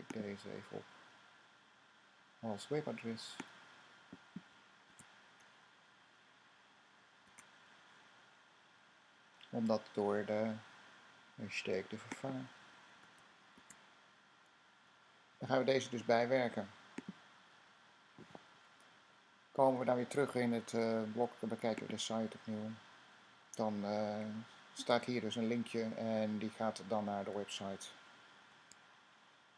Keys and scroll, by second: 4.8 typing, 7.1 typing, 7.3 super+w, 13.5 v.